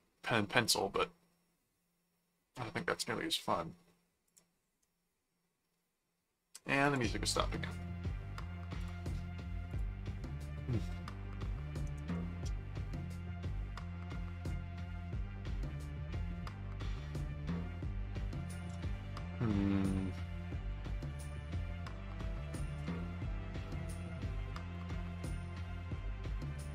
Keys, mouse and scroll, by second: 4.3 click, 6.9 click, 8.8 click, 9.7 click, 17.1-18.7 middle drag, 19.1 ctrl+4, 21.0 right click, 22.7 click, 23.7-25.3 drag, 24.5 alt+c, 25.0 right click, 26.0 click.